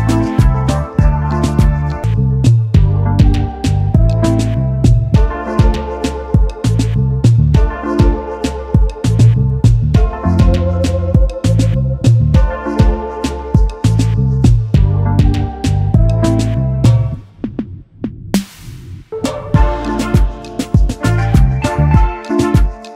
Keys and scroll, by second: 2.6 0, 5.0 space, 6.2 space, 6.6 ctrl+s, 19.9 ctrl+s, 21.9 ctrl+s.